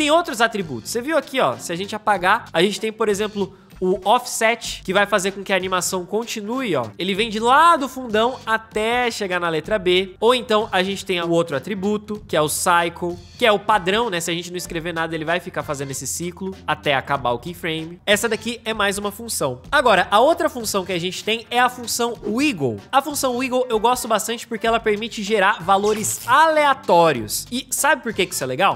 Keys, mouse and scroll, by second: 2.0 Return, 6.3 space, 9.9 space, 11.4 Return, 14.7 space, 24.8 space.